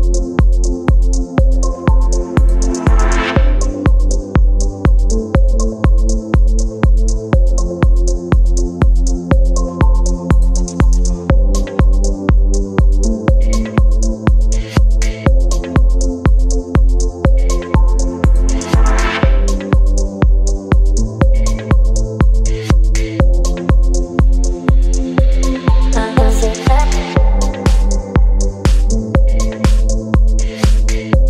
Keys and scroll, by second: 2.5-7.4 typing, 8.5 ctrl+a, 16.3 v.